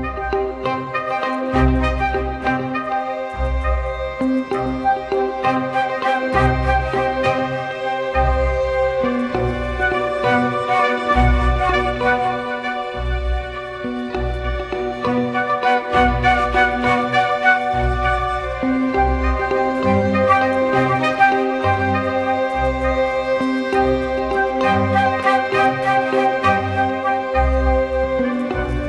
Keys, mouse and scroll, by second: 0.2-1.4 typing, 1.5 double click, 6.4 ctrl+-, 6.6 ctrl+-, 6.7 ctrl+-, 8.5-11.1 scroll down 1, 12.9 alt+click, 15.6-16.4 typing, 25.6 alt+click, 28.4 double click.